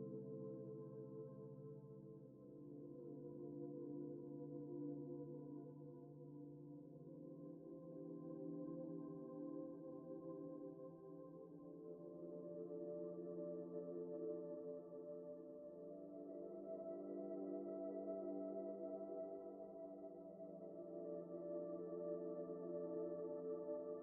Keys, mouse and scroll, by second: 1.1 alt+shift+click, 1.5 middle click, 1.7 alt+z, 2.0 middle click, 3.3 shift+middle click, 3.8-4.1 scroll up 1, 4.1 middle click, 4.3 alt+z, 6.7 alt+shift+click, 7.9 middle click, 8.3 scroll down 1, 8.4 alt+z, 8.7 middle click, 10.0 right click, 11.1 middle click, 14.5 double click, 16.9 middle click, 23.4 middle click.